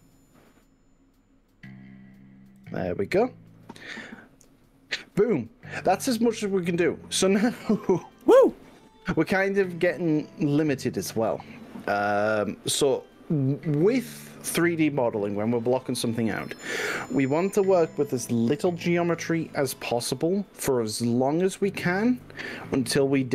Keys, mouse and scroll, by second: 2.7 click, 3.3 click.